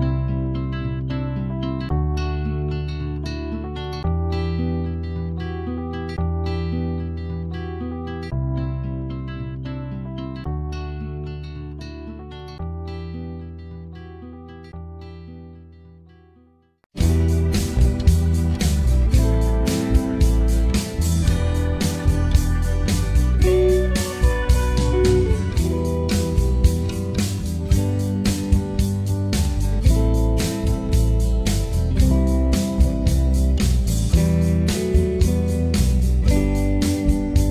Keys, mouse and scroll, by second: 0.3 alt+middle click, 0.6 alt+click, 0.8 alt+middle click, 1.2 click, 2.1 alt+middle click, 2.7 alt+click, 3.2 alt+middle click, 3.3 alt+click, 3.5 scroll up 1, 3.6 alt+click, 4.0 alt+middle click, 4.1-5.5 alt+drag, 5.5 alt+middle click, 5.7 alt+click, 6.6 alt+middle click, 6.7 click, 6.9 alt+middle click, 7.2 alt+click, 7.3 alt+middle click, 7.4 alt+click, 7.5 alt+middle click, 7.7 click, 8.3 alt+middle click, 8.4 alt+click, 8.5 alt+middle click, 9.2 click, 9.7 alt+middle click, 10.0-11.0 drag, 11.0 alt+middle click, 11.2-12.4 drag, 12.4 right click, 12.6 alt+click, 13.2 g, 13.4 click, 13.7 f, 13.8-14.8 shift+drag, 14.8 alt+middle click, 15.2 click, 15.4 right click, 15.8-16.9 drag, 16.9 right click, 17.3 alt+click, 17.5 alt+middle click, 17.6 scroll up 3, 17.9 click, 18.2 alt+middle click, 18.4 click, 18.7 alt+middle click, 18.9 alt+click, 19.3 alt+middle click, 19.4 alt+click, 20.0 alt+middle click, 20.2 click, 20.3 alt+middle click, 20.6 click, 20.7 right click, 20.9 scroll down 3, 21.0 alt+middle click, 21.1 alt+click, 21.3 alt+middle click, 21.4 alt+click, 21.5 alt+middle click, 21.7 right click, 22.4 alt+click, 22.5 scroll up 1, 22.7 alt+middle click, 23.0 f, 23.1 alt+middle click, 23.6-24.1 scroll down 1, 24.1 alt+middle click, 24.7 f, 24.8-27.4 drag, 27.4 alt+middle click, 27.5 scroll up 1, 27.6 alt+middle click, 27.7 alt+click, 27.8 alt+middle click, 28.2-29.2 drag, 29.8 alt+middle click, 30.0 click, 30.3 scroll up 2, 30.4 f, 30.7 right click, 30.9 shift+click, 31.3 alt+middle click, 31.4 right click, 31.6 click, 32.0 ctrl+z, 32.2 f, 32.4 right click, 32.9 click, 33.6 ctrl+z, 33.7 click, 34.4 alt+middle click, 34.7 alt+click, 34.8 alt+middle click, 35.0 f, 35.3-36.4 drag, 36.4 scroll down 3, 36.4 alt+middle click, 36.6 alt+click, 36.7 alt+middle click, 36.9 alt+click, 37.0 alt+middle click, 37.1-37.5 scroll up 3, 37.2 alt+click.